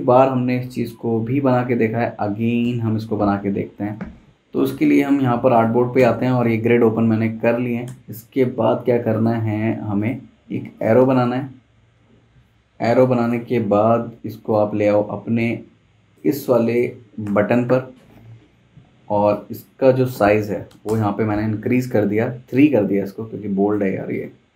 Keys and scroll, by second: 2.6 super+', 6.0 super+', 6.4 space, 7.9 p, 16.3 z, 17.3 v, 20.7 3, 20.9 Return.